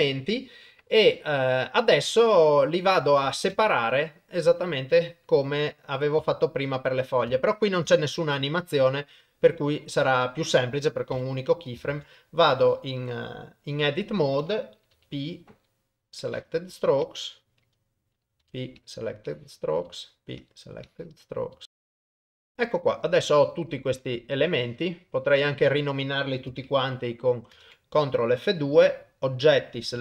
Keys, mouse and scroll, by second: 3.5 ctrl+Tab, 5.8 middle click, 6.3 shift+middle click, 6.7 middle click, 7.3 ctrl+middle click, 7.9 ctrl+shift+middle click, 9.0 middle click, 9.9 middle click, 11.2 Tab, 11.9 alt+a, 12.6 click, 14.9 p, 17.1 click, 18.4 p, 19.3 click, 19.8 p, 20.8 click, 21.5 p, 21.8 click, 21.9 p, 22.0 shift+middle click, 22.1 click, 22.3 p, 22.5 Tab, 23.4 middle click, 24.3 click, 25.1 middle click, 27.5 ctrl+F2.